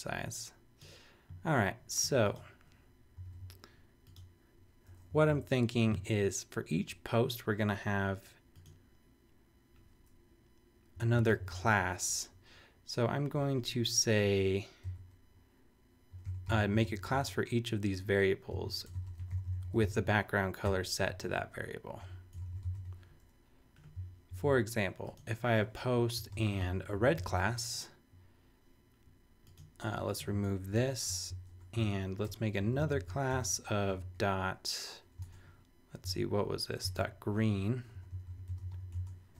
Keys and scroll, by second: 3.2 super+-, 5.1 Down, 10.9 Up, 11.2 super+Right, 11.5 super+Return, 12.4 Return, 14.8 ·, 15.9-23.2 typing, 24.3 super+s, 26.1-27.1 typing, 27.2 super+s, 30.7 super+BackSpace, 32.6 Down, 33.3 Return, 33.9-34.9 typing, 36.8 super+Tab, 37.9-39.3 typing.